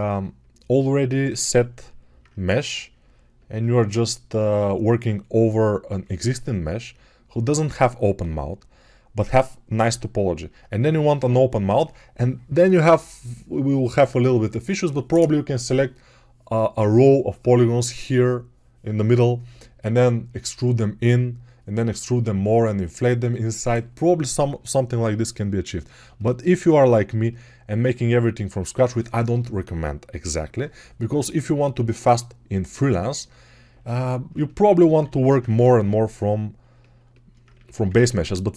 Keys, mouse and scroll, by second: 34.7 alt+q, 35.4 g, 37.4 1.